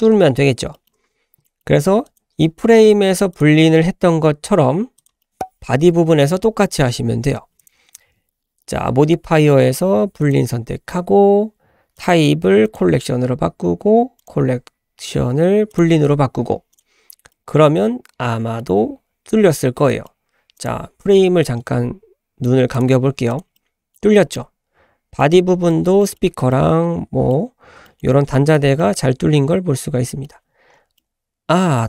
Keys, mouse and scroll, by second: 0.3-0.6 scroll up 2, 0.7 shift+middle drag, 1.4 middle click, 2.0 click, 3.3 click, 5.2 middle click, 5.3 click, 7.6-10.3 drag, 11.9-12.8 drag, 14.2-16.8 drag, 17.3-18.6 middle drag, 18.6-19.5 scroll up 4, 19.5 scroll down 2, 19.9 middle drag, 20.5 click, 21.5-22.7 scroll up 2, 22.7 scroll up 1, 22.7 click, 23.3 drag, 23.5-24.0 middle drag, 23.6 typing, 24.0 scroll up 1, 24.3-25.1 middle drag, 25.4 scroll down 1, 25.7 shift+middle click, 26.0 shift+middle click, 26.5-27.3 middle drag, 27.5 scroll down 1, 27.8 shift+middle drag, 28.3-28.7 shift+middle drag, 28.8 shift+middle click, 29.1-29.6 scroll up 3, 29.6-30.1 scroll down 3, 30.1 shift+middle click, 30.5-31.0 scroll up 2, 31.0-31.8 middle drag.